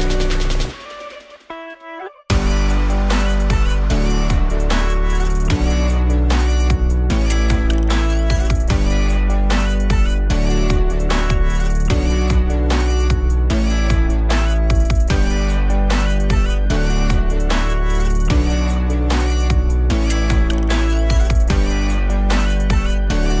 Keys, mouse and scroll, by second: 2.0 alt+click, 2.8 alt+middle click, 10.6 KP_Divide, 11.3 alt+middle click, 12.0 KP_1, 12.5 click, 12.9 alt+click, 14.2 alt+click, 15.3 alt+click, 16.2 alt+click, 17.1 alt+click, 17.9 alt+click, 18.9 alt+click, 20.1 alt+click, 21.0 alt+click, 22.0 alt+click, 23.2 alt+click.